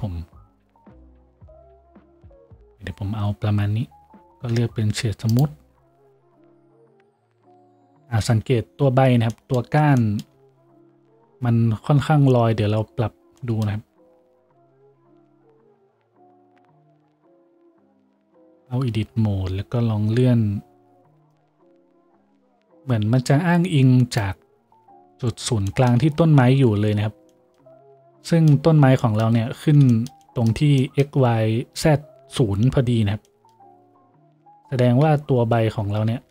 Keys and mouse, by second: 4.5-36.3 drag, 4.5 w, 6.5 a, 18.5 Tab, 19.2 a, 19.7 a, 25.6-35.2 shift+right drag, 35.2 z, 35.7 z.